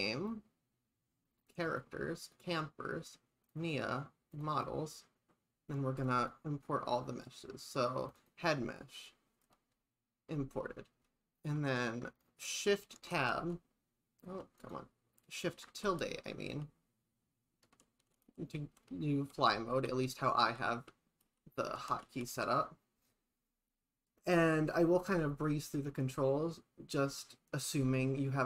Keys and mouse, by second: 13.0 shift+Tab, 13.4 a, 14.6 click, 15.7 shift+`.